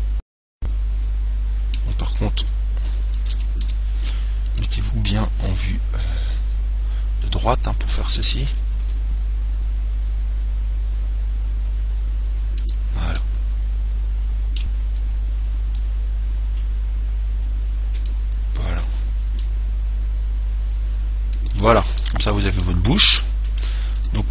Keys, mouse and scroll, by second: 3.5 ctrl+z, 4.7 KP_1, 5.7 KP_3, 7.3-10.2 middle drag, 9.1 s, 13.0 click, 13.4-15.4 middle drag, 16.1 click, 19.6 s, 21.8 click, 22.3-24.3 middle drag.